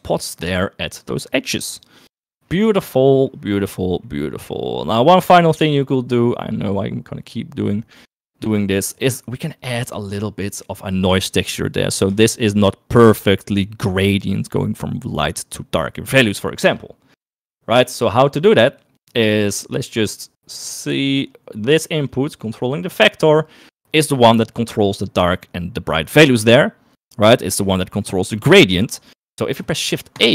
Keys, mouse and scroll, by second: 1.2 middle click, 3.9 middle click, 4.4 middle click, 5.0 middle click, 5.6 middle click, 7.1 middle click, 8.4 middle click, 8.8 click, 10.1 middle click, 10.9 middle click, 13.0 shift+middle click, 18.8 middle click, 20.3-21.6 middle drag, 22.6 click, 30.1 shift+a.